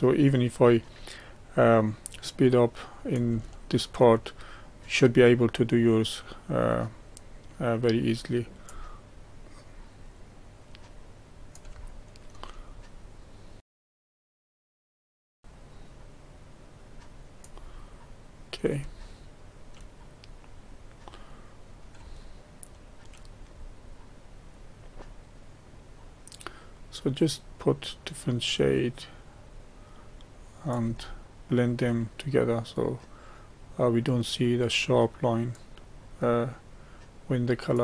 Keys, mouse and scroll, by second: 0.1-3.4 drag, 3.4 shift+middle click, 4.2-7.3 drag, 8.7-11.8 drag, 11.8 shift+middle click, 12.6-13.6 drag, 13.7 click, 13.9 click, 14.2 shift+middle click, 14.2 click, 14.3 middle click, 14.4 click, 14.6 click, 14.7 scroll down 2, 14.8 click, 15.0 middle click, 15.1 click, 15.4 middle click, 15.4 click, 17.7 middle click, 20.2-21.1 scroll up 4, 21.1 middle click, 24.2 middle click, 25.1-28.3 drag, 29.9-31.1 drag, 31.1 shift+middle click, 32.0-35.1 drag, 35.8-37.8 drag.